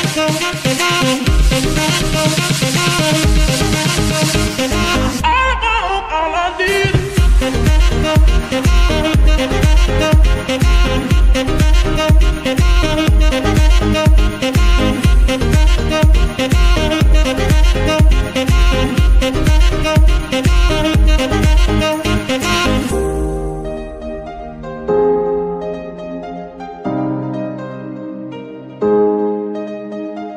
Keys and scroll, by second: 1.5 Escape, 3.5 r, 7.7 Escape, 12.9 Escape, 15.9 r, 19.1 Escape, 24.2 Escape, 26.0 y, 28.7 Escape.